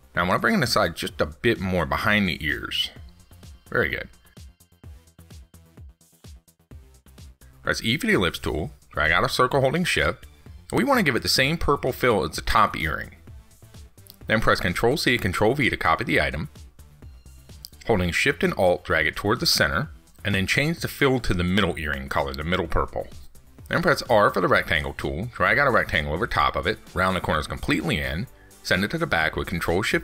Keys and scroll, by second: 15.9 ctrl+c, 16.1 ctrl+v, 28.0 ctrl+shift+Down.